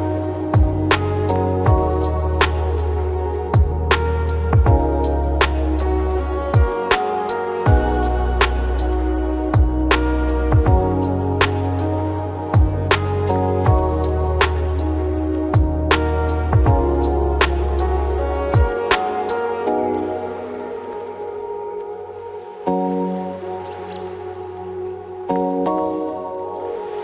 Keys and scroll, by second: 0.2 ctrl+t.